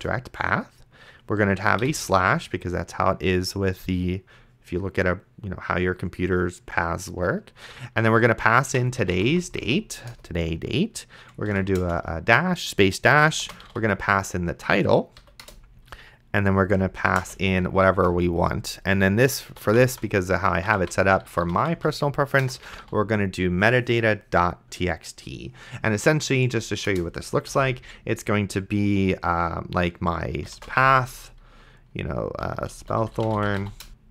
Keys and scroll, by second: 0.0 Return, 1.8 /, 8.7-9.8 typing, 10.1 Return, 11.4 space, 11.5 =, 11.8 space, 13.4-14.3 typing, 15.2 Down, 15.4 Return, 16.6-23.3 typing, 26.9 Return, 27.5 /, 30.4 c, 30.8 /, 32.3-34.1 typing.